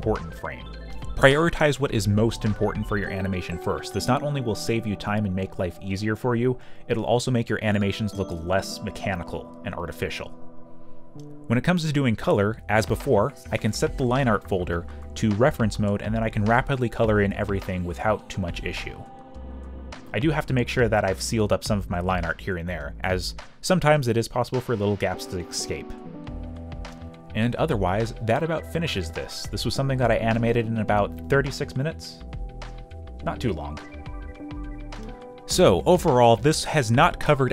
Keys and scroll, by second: 0.9 ctrl+z, 4.0-7.7 typing, 8.0 ctrl+shift+q, 10.2 ,, 10.7 space, 16.2 ,, 16.7 ,, 17.1 ., 17.2 ., 18.9 ., 20.1 ., 21.0 ., 34.2 ctrl+s.